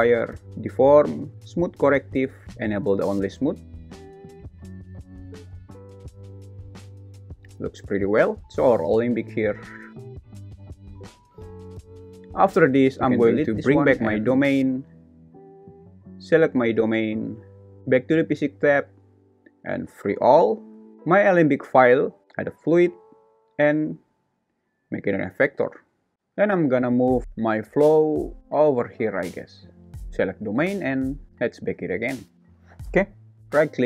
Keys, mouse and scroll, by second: 3.1 click, 3.6 space, 8.2 space, 9.2 click, 10.5 x, 14.0 click, 16.4 click, 20.2 click, 20.9 shift+z, 21.6 g, 23.8-25.5 drag, 26.1-28.4 typing, 27.1 Escape, 27.3 Escape, 31.4-33.4 drag, 33.4 right click, 33.4 space.